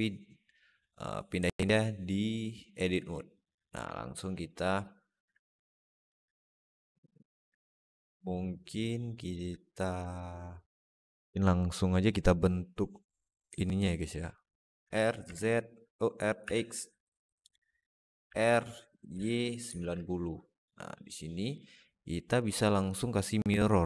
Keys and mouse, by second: 1.4-2.7 alt+middle drag, 3.2 click, 3.8 alt+middle click, 4.5 alt+middle click, 5.4 click, 6.4 click, 7.4-9.2 alt+middle drag, 10.0-11.0 alt+middle drag, 13.5 alt+middle click, 14.7 r, 18.1 r, 22.3-23.8 drag.